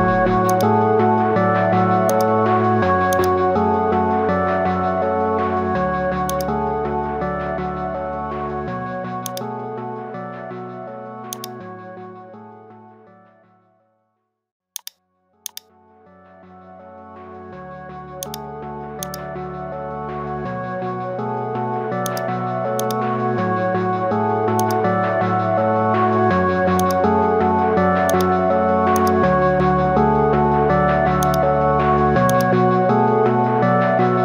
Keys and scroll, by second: 8.0 ctrl+i, 16.8 ctrl+z.